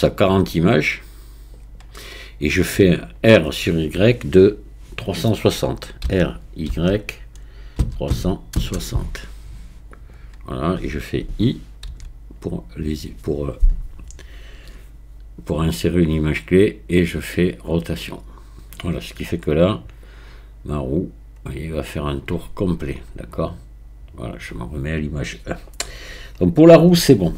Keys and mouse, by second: 6.1 r, 6.7 y, 8.1 KP_3, 8.1 KP_6, 8.6 KP_0, 11.9 i, 20.1-24.3 drag.